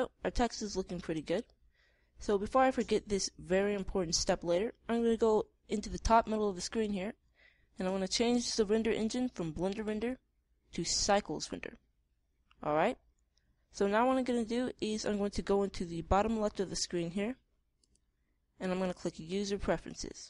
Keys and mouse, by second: 1.2-3.0 drag, 10.2-12.0 drag, 18.2-20.0 drag.